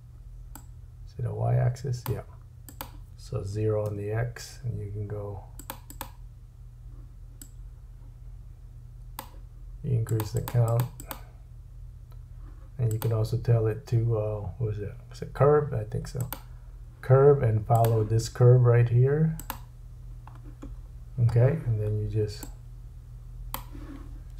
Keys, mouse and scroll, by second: 0.5 click, 2.7 click, 5.6 click, 5.9 click, 7.4 click, 10.0 click, 10.4 click, 10.8 click, 11.0 click, 12.9 click, 17.8-22.4 drag, 20.8-22.4 scroll down 3.